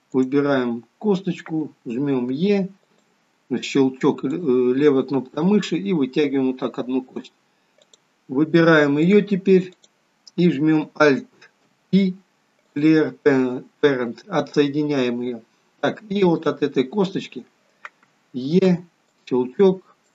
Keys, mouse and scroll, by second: 2.5 e, 4.3 click, 5.5 click, 9.1 click, 9.8 click, 11.7 alt+p, 16.3 click, 18.7 e, 20.0 click.